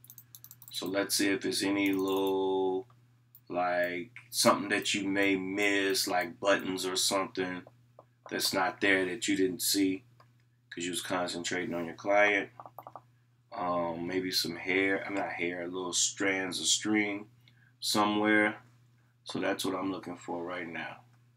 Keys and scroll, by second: 0.0 scroll down 1, 0.1 scroll up 1, 0.3 scroll down 1, 0.4 scroll up 1, 0.5 scroll down 1.